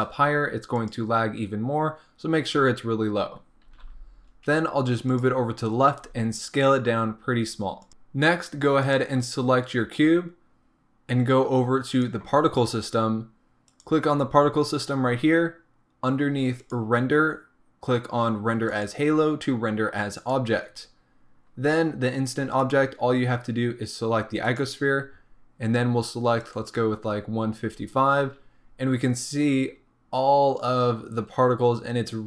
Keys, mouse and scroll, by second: 3.7 g, 6.0 s, 8.9 click, 13.7-29.1 drag, 29.8 scroll up 1.